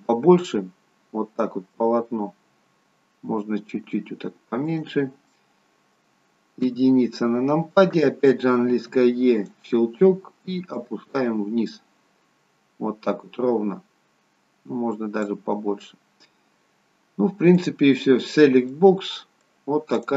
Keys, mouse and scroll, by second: 2.5 s, 5.3 middle click, 6.6 KP_1, 8.6 e, 10.7 click, 17.5 click, 18.6 middle click, 20.1 click.